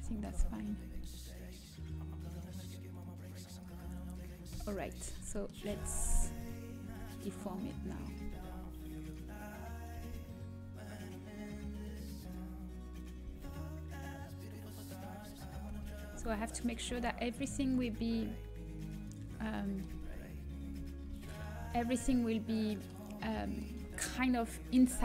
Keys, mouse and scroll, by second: 1.1-2.6 drag, 4.5 KP_3, 5.0 middle click, 5.6 z, 6.3 middle click, 6.8 g, 9.9 g, 13.2 g, 15.6 z, 16.1 z, 17.1 g, 19.2-21.6 middle drag, 19.8 z, 20.6 z, 21.0 z, 21.6 a, 22.0-24.4 middle drag.